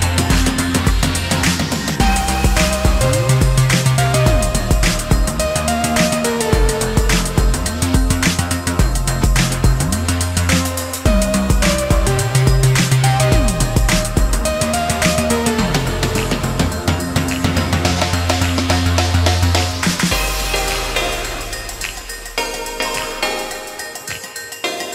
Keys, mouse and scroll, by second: 5.4-6.7 typing, 7.3 shift+middle click, 9.7 space, 19.2-19.9 typing, 20.9 shift+r, 23.5 alt+f.